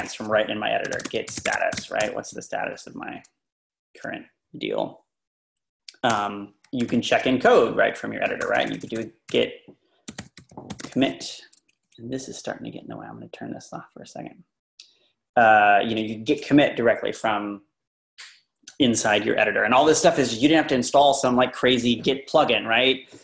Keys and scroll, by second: 0.6-2.3 typing, 6.2 Return, 6.9 :, 7.1 Up, 7.2 Down, 7.9 Up, 8.6-12.1 typing.